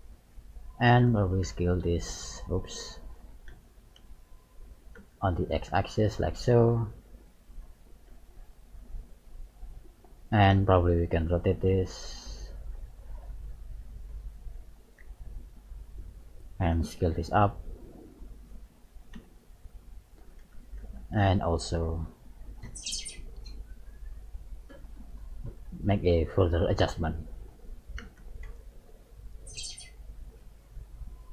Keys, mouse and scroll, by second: 1.0 d, 1.4 x, 3.9 s, 6.8 click, 8.1 z, 8.6 middle click, 10.5 KP_3, 12.3 r, 13.6 click, 15.1 r, 16.7 s, 19.1 KP_1, 20.8 s, 24.6 click, 26.1 middle click, 28.5 s, 30.3 click.